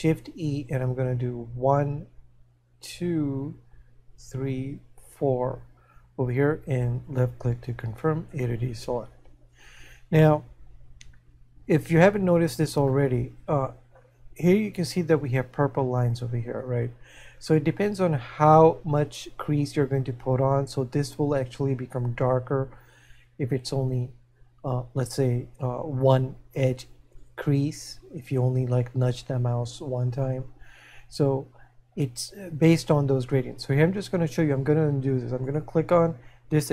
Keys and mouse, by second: 8.3 a, 13.4 middle click.